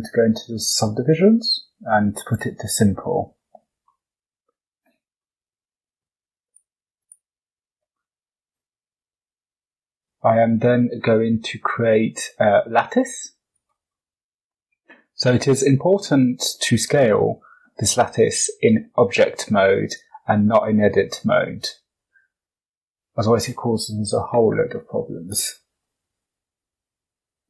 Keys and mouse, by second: 2.1 click, 3.8 drag, 4.1 middle click, 6.4 click, 6.9 click, 8.9 shift+c, 10.0 shift+a, 19.8-21.8 drag, 22.3 click, 22.8 click, 25.2 KP_7.